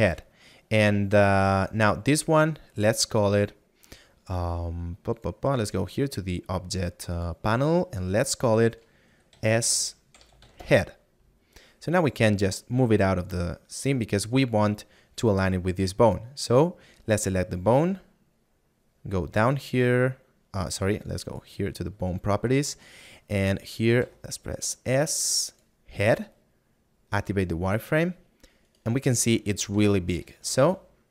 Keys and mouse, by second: 0.5 middle click, 10.2 shift+e, 12.3 click, 18.2 middle click, 21.2 click, 28.2 middle click, 29.5 shift+Tab.